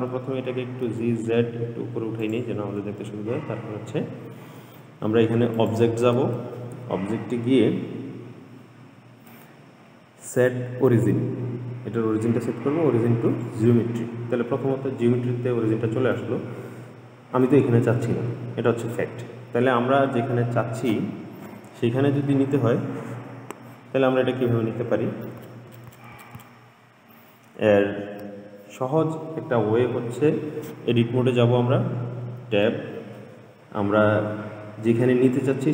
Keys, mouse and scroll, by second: 0.2 g, 5.8-9.0 drag, 16.4-19.5 middle drag, 32.5 Tab.